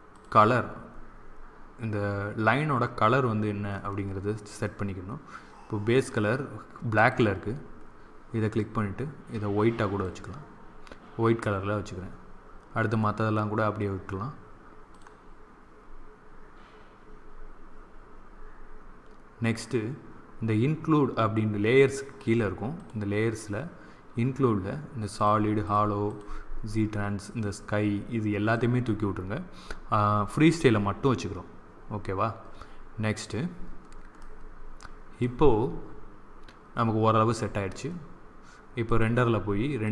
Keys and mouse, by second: 0.0-8.6 drag, 14.8 click, 15.5-22.0 middle drag, 22.0-24.6 drag, 25.0-28.9 drag, 34.1-36.7 middle drag, 38.8-39.9 drag.